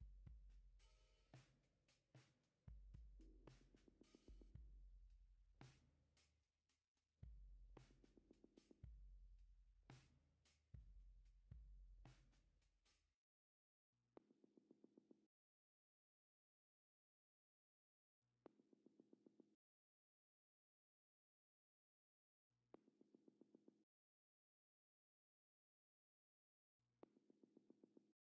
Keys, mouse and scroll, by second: 8.0 right click, 25.7-28.3 scroll up 1.